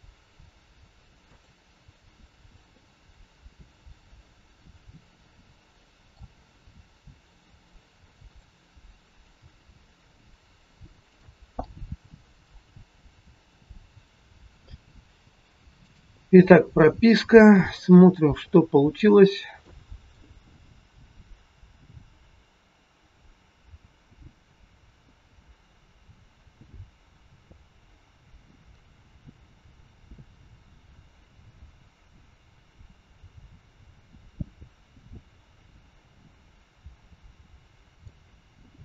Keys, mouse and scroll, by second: 2.0 scroll down 1, 2.6 middle click, 8.2 click, 9.3 g, 11.5 middle click, 14.7 a, 15.0 i, 17.5 click, 18.4 middle click, 19.2-19.5 scroll down 4, 19.5 middle click, 21.3 click.